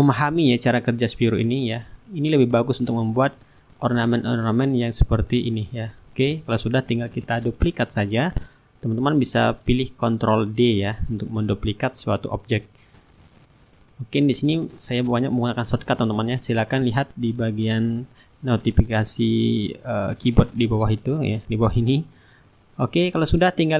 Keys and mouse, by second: 0.3 click, 1.5-3.2 drag, 2.0-3.2 middle drag, 3.9-6.8 drag, 6.9-12.2 shift+right drag, 7.9-15.3 drag, 12.9-15.3 right drag, 15.3 ctrl+d, 16.4-21.6 drag, 21.9 ctrl+g, 23.5 shift+click.